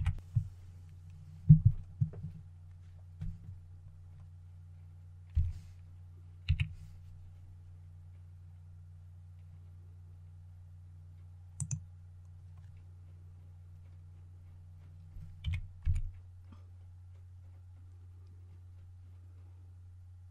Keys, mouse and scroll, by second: 5.2 s, 11.4 click, 15.3-15.7 typing.